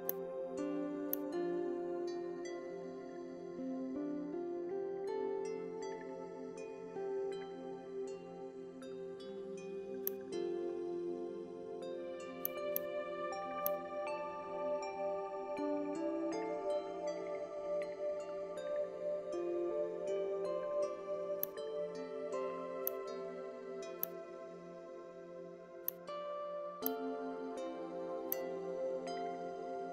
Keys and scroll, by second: 3.6 ctrl+shift+b, 6.6 ctrl+alt+b.